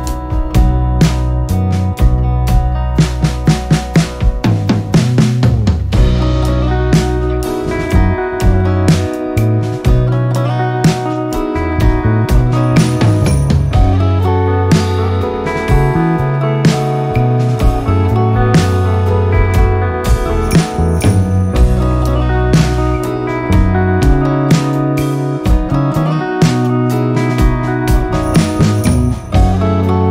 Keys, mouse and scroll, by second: 7.9 ctrl+z, 9.0-30.1 drag.